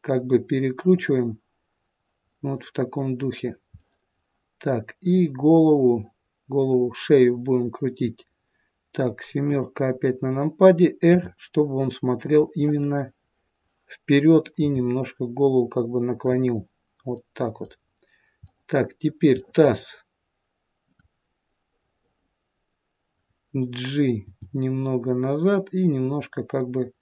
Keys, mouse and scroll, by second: 2.2 middle click, 3.7 middle click, 4.9 click, 5.5 middle click, 9.4 KP_7, 11.1 r, 14.5 r, 17.1 middle click, 17.7-18.4 scroll down 1, 18.4 middle click, 19.4 middle click, 20.8 click, 21.6 middle click, 24.3 g.